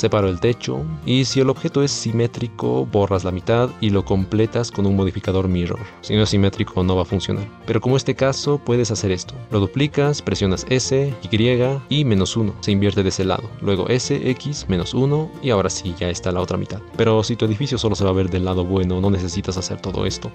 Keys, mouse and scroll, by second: 2.0-15.3 middle drag, 15.3 g, 16.9 click, 17.1 click, 18.0-20.3 middle drag.